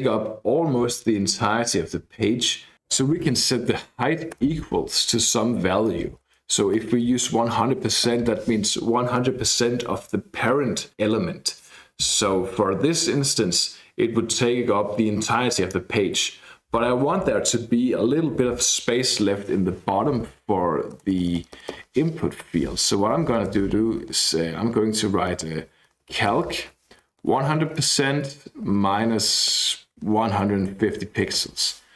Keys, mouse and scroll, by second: 3.4-4.3 typing, 6.4-7.7 typing, 20.5-21.1 Left, 21.2 Left, 22.4 shift+/, 23.4 BackSpace, 24.7-25.1 Right, 25.7 Left, 25.8 Left, 25.8-27.1 typing, 27.4 Right, 27.8 Right, 27.9 Right, 28.7-31.4 typing.